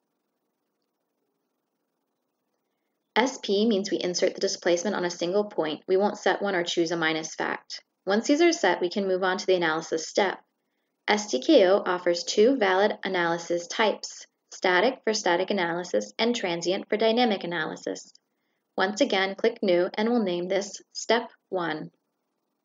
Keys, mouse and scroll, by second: 2.3 shift+click, 5.9 click, 9.7 click, 16.1 click, 17.7 click.